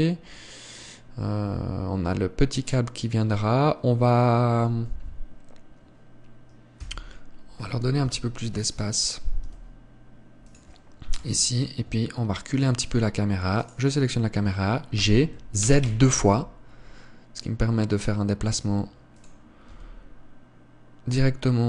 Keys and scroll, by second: 7.3 Escape, 8.6 KP_7, 9.9 g, 11.7 KP_0, 15.5 g, 20.2 g.